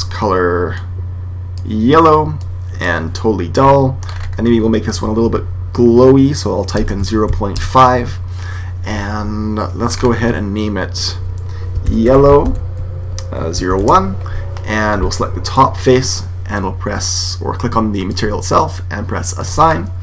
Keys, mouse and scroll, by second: 2.3 click, 3.9-6.0 middle drag, 4.8 click, 9.8-11.7 middle drag, 10.9 click, 12.2 l, 15.3 right click, 18.0-20.0 drag.